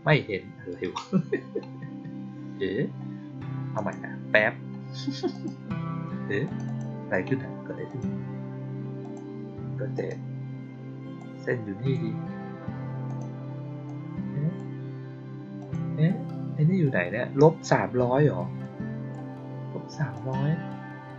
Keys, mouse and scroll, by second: 3.7 click, 5.2 click, 6.3 click, 6.6 click, 7.8 click, 8.9 click, 11.1-11.8 drag, 13.0 click, 13.8-14.5 drag, 15.5 click, 18.5-19.0 drag, 20.0 click.